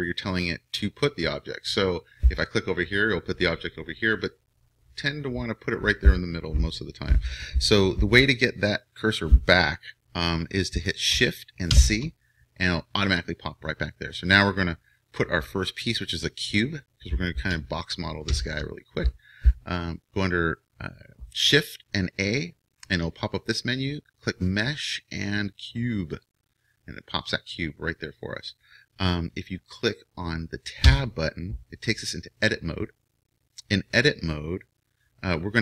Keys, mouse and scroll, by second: 2.4-11.7 drag, 11.7 shift+c, 18.4 shift+a, 30.8 Tab.